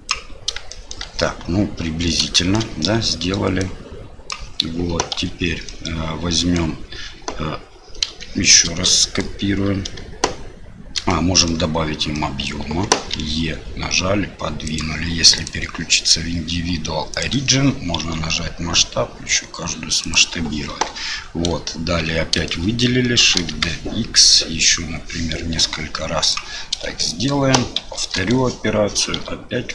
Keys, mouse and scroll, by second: 0.7 shift+middle click, 2.3 shift+middle click, 3.6 click, 5.6 middle click, 8.1 KP_7, 8.9 shift+middle click, 11.1 middle click, 12.1 middle click, 13.1 e, 15.3-17.2 drag, 20.7 KP_7, 22.0 a, 22.4 shift+middle click, 23.2 shift+d, 27.0 shift+middle click, 27.8 shift+r, 29.1 a.